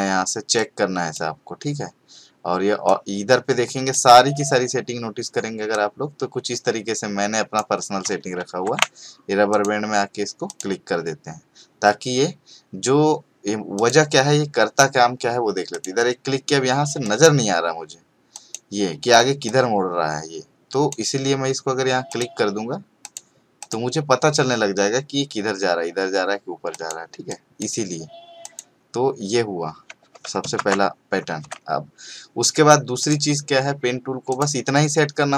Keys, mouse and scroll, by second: 9.5 click, 13.7 click, 15.7-21.0 drag, 26.7 click, 30.6 ctrl+d, 31.4 v, 33.0 click.